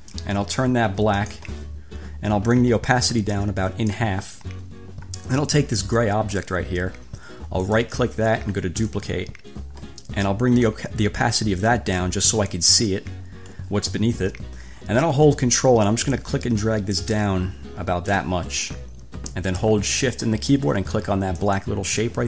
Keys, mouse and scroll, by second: 1.4 click, 2.8-4.4 drag, 5.9 click, 7.8 click, 9.1 click, 10.8-13.1 drag, 16.0 ctrl+click, 21.6 shift+click.